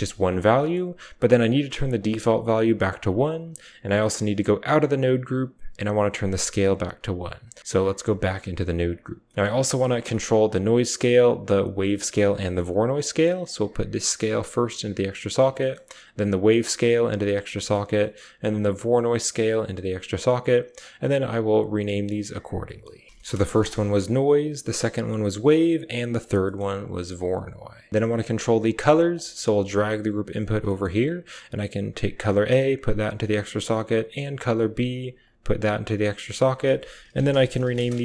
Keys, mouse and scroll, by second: 1.9 click, 4.5 Tab, 5.6 typing, 6.1 click, 7.3-10.4 typing, 7.4 click, 8.6 click, 9.3 click, 11.8 click, 12.2 click, 12.4 typing, 13.5-14.5 drag, 13.5-15.0 typing, 15.0 click, 15.5 click, 16.4-17.0 drag, 17.0 typing, 17.1 click, 17.6 click, 17.8 click, 18.2 typing, 18.8-19.6 drag, 19.6 typing, 20.6-23.2 drag, 23.2 middle click, 24.5 middle click, 26.3 drag, 26.6 click, 27.3 typing, 28.0 click, 28.8 click, 29.0-33.3 typing, 29.2 click, 30.6 drag, 31.8 click, 32.1-32.8 drag, 33.9-34.4 drag, 34.6 drag, 35.0-37.1 typing, 35.1 click, 36.1 click, 36.3-37.9 drag.